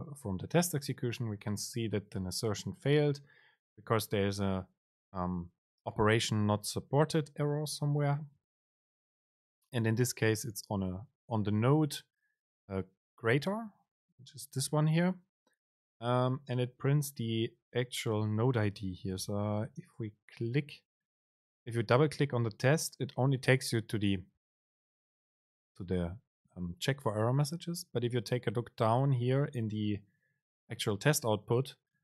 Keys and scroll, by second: 19.5 super+c.